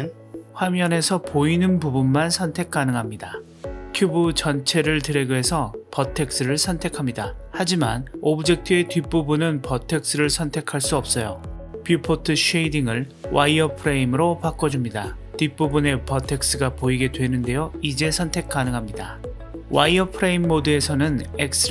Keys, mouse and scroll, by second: 0.1 click, 1.8 drag, 2.8 click, 3.4 click, 3.9-4.4 drag, 6.8-8.2 middle drag, 9.1-9.4 drag, 17.0-17.4 drag, 18.9-19.4 drag, 19.4-21.7 middle drag.